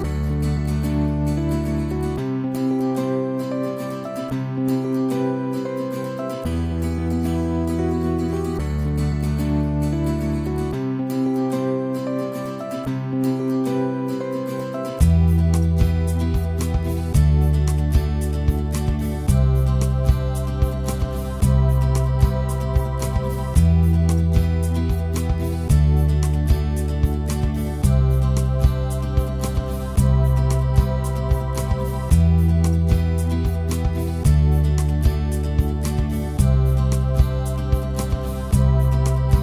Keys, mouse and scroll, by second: 0.2 ctrl+click, 0.6 ctrl+z, 1.4 ctrl+click, 1.6 ctrl+z, 3.1 right click, 3.3 click, 3.5 ctrl+z, 3.6 ctrl+click, 4.0 alt+right click, 4.1 alt+click, 4.3 alt+right click, 4.4 alt+click, 4.5 ctrl+z, 4.7-5.8 ctrl+drag, 5.8 alt+right click, 5.9 alt+click, 6.1 ctrl+z, 6.2 ctrl+z, 6.4 alt+click, 7.0 right click, 7.2 click, 7.9-10.5 alt+middle drag, 10.5 alt+click, 11.3 f, 11.6 ctrl+click, 11.8 ctrl+z, 12.8-16.1 drag, 16.1 ctrl+z, 16.2 click, 16.5 ctrl+z, 16.9 right click, 17.2 click, 17.4 ctrl+z, 18.4 right click, 19.3-20.4 drag, 20.4-21.8 right drag, 21.8 alt+click, 22.2 alt+right click, 22.3 alt+middle click, 22.5 alt+click, 23.2 alt+middle click, 23.5 click, 23.7 alt+right click, 23.8 alt+click, 24.4 alt+middle click, 24.6-26.6 alt+drag, 26.6 alt+middle click, 26.8 alt+click, 26.9 alt+right click, 27.1 alt+click, 27.6-28.4 ctrl+z, 28.4-39.4 alt+drag.